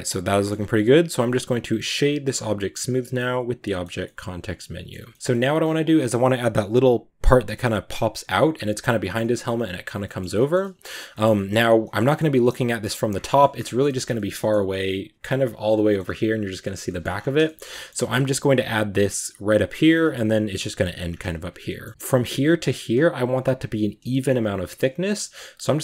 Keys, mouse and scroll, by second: 0.4-1.9 scroll up 1, 1.9 w, 2.4-3.7 middle drag, 3.7 scroll down 2, 3.9-4.9 middle drag, 4.9 Tab, 5.1 middle click, 5.2-5.8 scroll up 3, 5.3 middle drag, 5.8 a, 8.2-11.1 middle drag, 11.1-11.9 scroll up 2, 11.2 middle click, 12.0-12.6 shift+middle drag, 12.6 scroll up 1, 12.9-13.6 scroll down 9, 13.1 middle click, 13.6-14.7 middle drag, 14.7-15.7 scroll down 5, 15.7 middle click, 15.8-16.5 scroll up 6, 16.5-17.0 shift+middle drag, 17.0-19.6 scroll up 8, 17.3 shift+middle drag, 17.6-17.9 shift+middle drag, 19.6-19.9 scroll up 2, 19.6 shift+middle click, 20.9-21.3 scroll down 2, 21.5 shift+middle drag, 21.8 scroll up 1, 21.9 shift+middle click, 22.0-23.9 right drag, 23.9 shift+middle click, 24.1 shift+scroll up 1, 24.7 right drag, 24.9 scroll up 1.